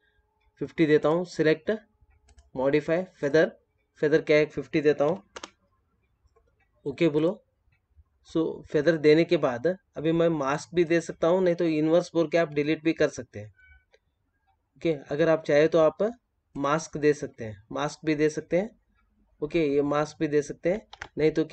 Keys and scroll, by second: 20.8 ctrl+z.